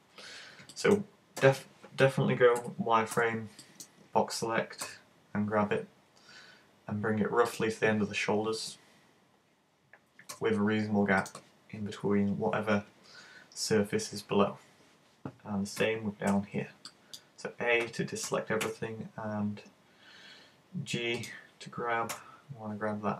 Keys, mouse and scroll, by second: 0.8 middle click, 2.6 z, 3.2 b, 7.6 click, 10.4 g, 11.3 click, 14.6-15.8 scroll down 2, 15.8 a, 16.3 b, 21.3 click, 22.1 g.